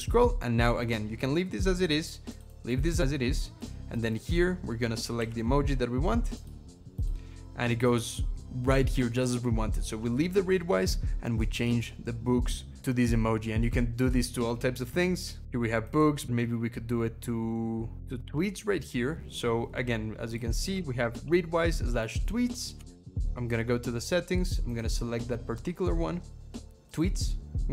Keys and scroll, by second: 5.0 super+., 20.8 ctrl+shift+h, 22.8 ctrl+,.